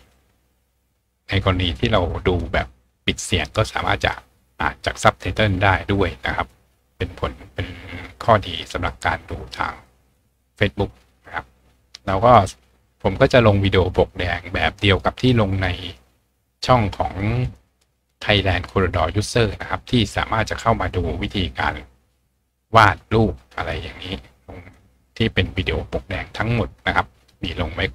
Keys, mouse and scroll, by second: 10.5-10.9 scroll down 1, 11.4-12.4 scroll down 1, 12.4-15.3 scroll up 1, 17.4 click, 20.5 click, 21.6 click, 23.0-24.0 scroll down 2, 24.5-25.2 scroll up 2.